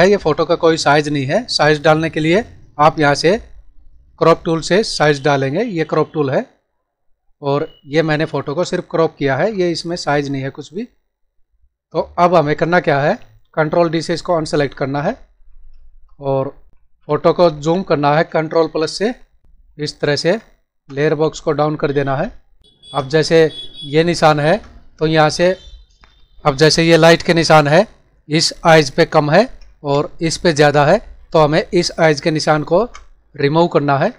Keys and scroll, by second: 15.2 ctrl+d, 16.7 ctrl+=, 17.4 ctrl+-, 18.7 ctrl+=, 19.4 ctrl+-, 20.0 ctrl+=, 22.7 ctrl+=, 23.2 space, 28.9 ctrl+-, 29.8 space, 34.0 ctrl+=.